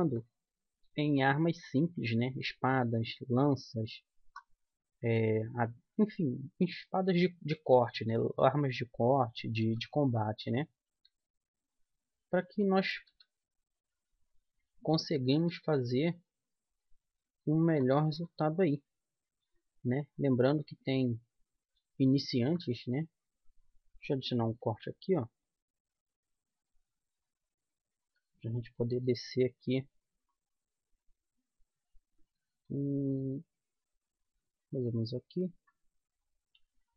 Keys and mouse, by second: 1.3 click, 1.3 right click, 1.6 middle click, 1.7-3.0 drag, 3.0 middle click, 3.4-5.4 drag, 3.8-5.5 right drag, 5.5 click, 5.6 g, 7.9-9.7 drag, 8.1 g, 9.8-13.1 drag, 10.0 g, 11.4 g, 13.3-15.1 right drag, 13.5 g, 15.7-17.5 right drag, 15.9 g, 18.6 middle click, 19.2-25.0 middle drag, 25.0 ctrl+r, 28.4-30.2 right drag, 29.3 g, 32.6-34.4 right drag, 32.9 g, 34.9-36.8 drag.